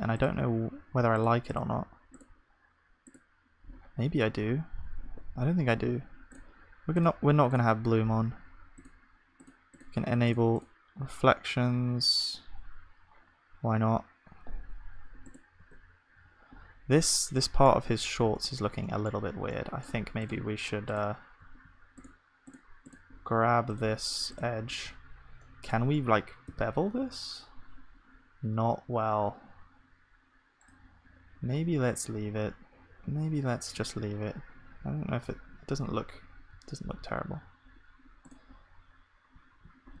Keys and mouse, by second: 14.7 middle click, 15.3 click, 15.7 Tab, 24.7 z, 26.5 ctrl+b, 32.3 Tab, 34.0 ctrl+s, 35.3 KP_0, 36.5 z, 38.6-40.0 drag, 39.5 ctrl+s.